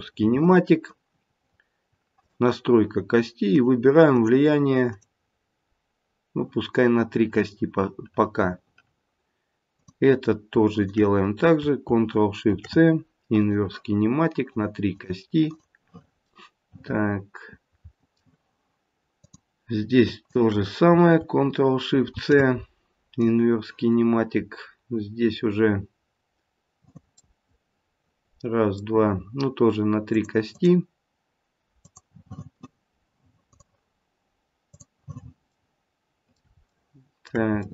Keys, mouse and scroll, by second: 0.0 ctrl+shift+c, 2.1 click, 3.5 click, 4.1 click, 4.9 click, 9.7 click, 10.7 shift+click, 12.5 ctrl+shift+c, 14.4 click, 14.9 click, 15.5 click, 16.2 middle click, 16.4 middle click, 18.5 middle click, 19.1 click, 20.2 shift+click, 22.1 ctrl+shift+c, 27.2 middle click, 27.8 middle click, 30.1 click, 30.4 click, 31.7 click, 34.7 click, 35.5 middle click, 36.6 shift+middle click, 37.6 shift+middle click.